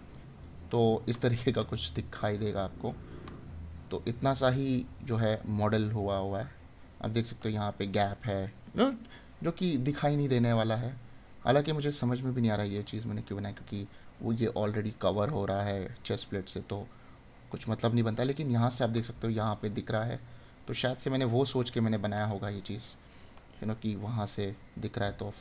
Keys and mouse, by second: 7.3 right click, 10.3 right click, 16.0 right click, 23.2 right click, 25.3 right click.